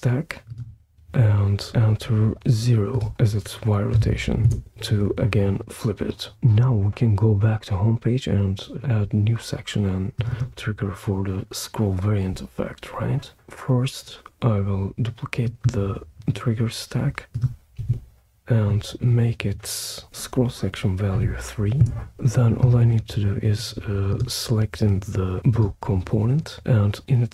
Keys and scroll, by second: 3.9 0, 4.5 Return, 17.7 super+d, 21.1 3, 21.8 Return.